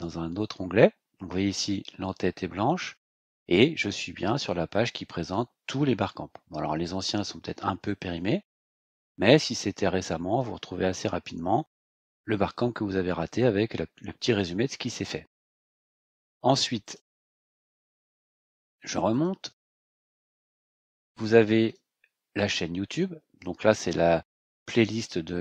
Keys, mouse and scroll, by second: 3.2-4.5 scroll down 6, 4.9-6.7 scroll down 8, 8.2 scroll up 2, 8.4 scroll down 2, 8.9-9.5 scroll up 4, 16.8 click, 19.1 click, 21.6 click, 24.7 click.